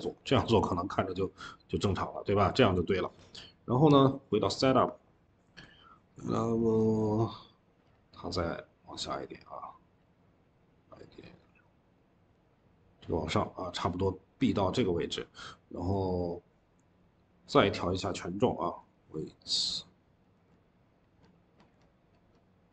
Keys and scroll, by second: 0.4 ctrl+z, 2.5 ctrl+z.